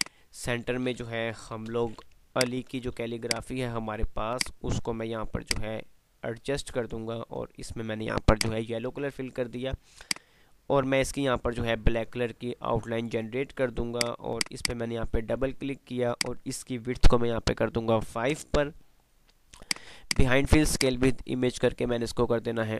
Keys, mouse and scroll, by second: 1.7 shift+Page_Up, 2.5 shift+click, 2.7-3.7 typing, 3.5 click, 5.4-8.4 shift+drag, 10.4 right click, 14.1 click, 18.5 BackSpace, 19.8 click.